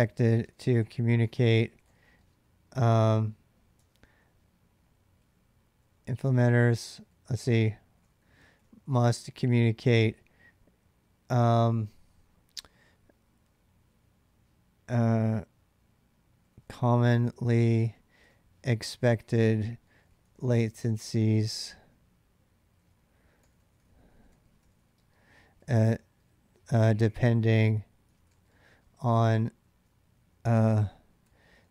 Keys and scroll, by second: 0.0-2.0 typing, 3.4-9.2 typing, 16.3-25.4 typing, 26.5-31.7 typing.